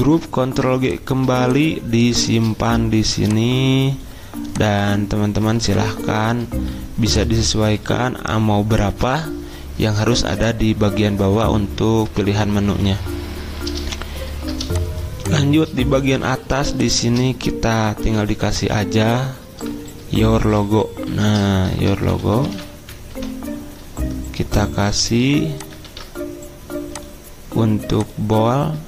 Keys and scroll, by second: 0.0 ctrl+g, 20.5-23.0 typing, 23.1 Escape, 25.8 ctrl+a.